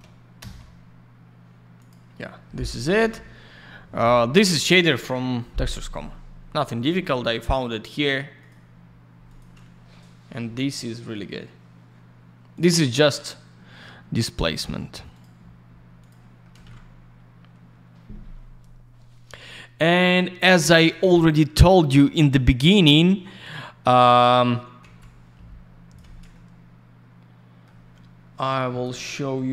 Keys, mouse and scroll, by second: 0.4 Return, 1.7 click, 1.9 click, 8.4 click, 8.5 click, 9.2 click, 9.3 click, 12.5 click, 12.6 click, 15.1 click, 15.2 click, 16.0 click, 16.1 click, 16.4 middle click, 16.6 alt+shift+й, 25.0 click, 25.9 F4, 26.3 alt+middle click, 28.6 click, 29.2 middle click, 29.3 middle click.